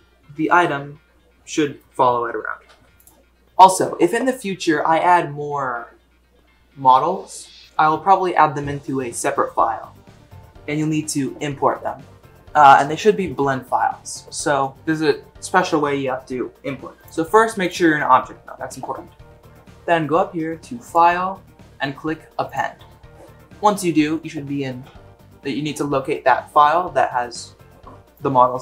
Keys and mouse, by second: 2.7 g, 17.0-17.7 drag, 20.8-22.6 drag.